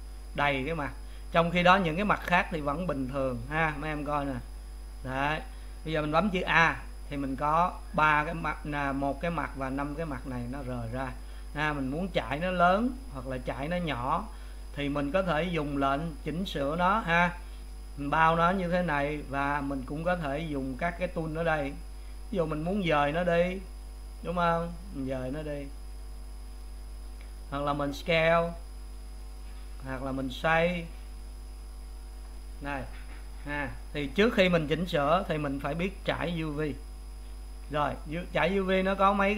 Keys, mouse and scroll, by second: 3.1 click, 4.1 click, 5.1 click, 6.6 a, 11.6 middle click, 12.4 click, 17.7 click, 22.8-24.0 drag, 27.3-28.3 drag, 30.0-31.3 drag, 35.2 click, 37.6-39.3 middle drag.